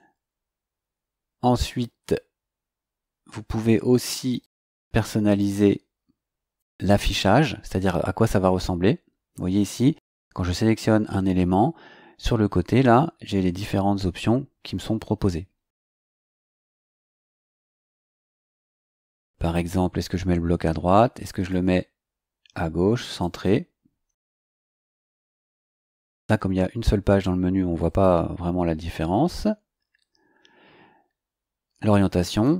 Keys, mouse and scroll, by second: 4.4 click, 5.3 click, 21.4 click, 23.0 click, 27.8 click, 32.3 click.